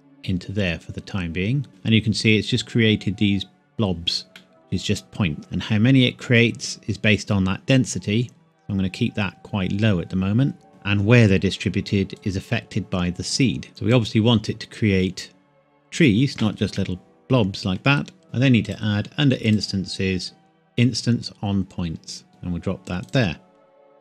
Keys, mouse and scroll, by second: 2.0 scroll up 1, 4.4 middle click, 4.5 scroll up 1, 5.4 click, 9.9-10.7 scroll up 1, 12.2 click, 16.8 middle click, 18.7 click, 22.3 click.